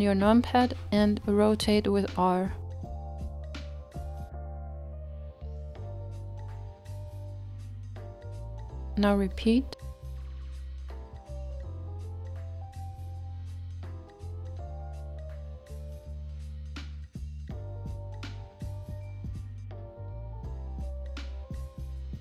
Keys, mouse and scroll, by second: 0.9-1.9 scroll up 2, 1.9 scroll up 1, 2.1 r, 8.4-13.9 shift+middle drag, 13.9-14.9 shift+right drag, 14.9-19.9 middle drag, 19.9 shift+d.